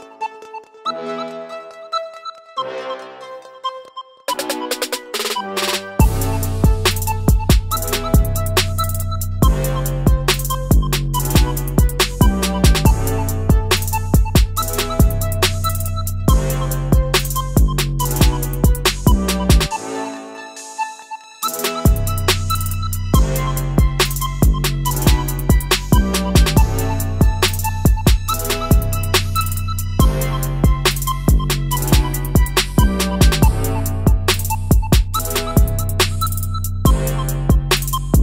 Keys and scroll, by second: 1.9 typing, 2.4 Return, 10.3 Delete, 12.1-12.9 typing, 23.2 Delete.